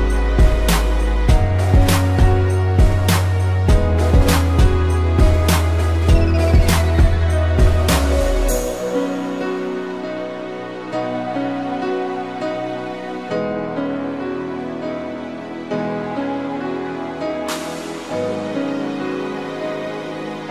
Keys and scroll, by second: 0.2 ctrl+=, 0.4 space, 0.7 p, 4.1 space, 6.0 a, 7.9 space, 8.5 p, 10.4 space, 13.0 space, 14.4 space, 16.3 space, 18.9 a.